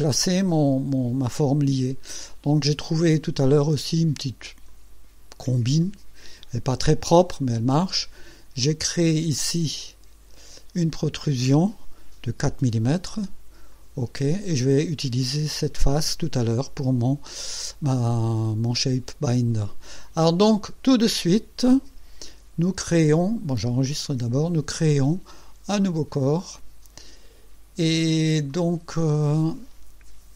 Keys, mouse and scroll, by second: 4.7 click, 9.8 click, 12.4 KP_4, 13.7 click, 24.0 ctrl+s, 25.8 click, 28.0 scroll down 2, 28.5-29.2 right drag.